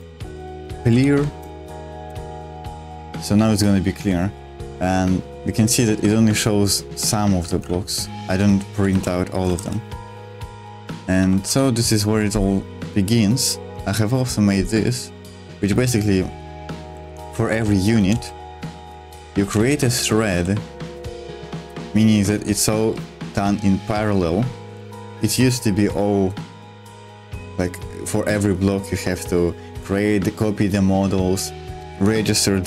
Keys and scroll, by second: 0.0-3.7 typing, 7.5 super+1, 8.9-11.9 typing, 15.7-22.1 typing, 20.9 Escape, 21.6 super+1.